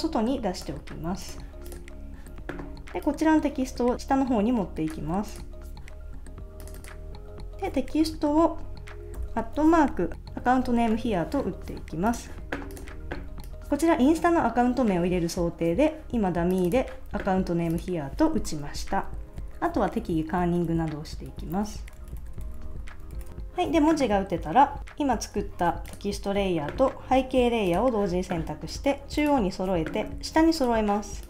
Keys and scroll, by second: 9.2 @, 18.7 Left, 19.3 alt+Left, 20.0 Right, 20.7 alt+Left, 21.3 alt+Right, 21.5 Left, 21.9 Right, 22.2 alt+Left, 23.1 alt+Right.